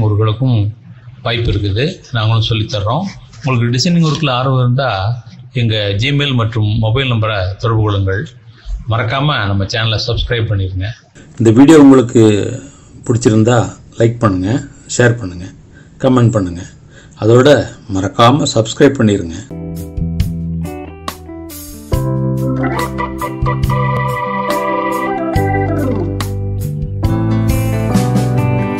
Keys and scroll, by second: 4.6 ctrl+z, 10.7 ctrl+-, 16.4 ctrl+s.